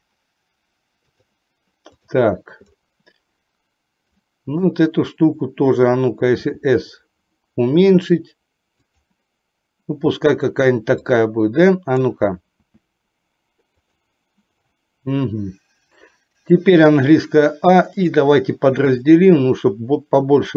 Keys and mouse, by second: 4.2 click, 6.4 s, 11.1-12.2 drag, 12.7 s, 16.9 a, 18.1-19.2 right drag.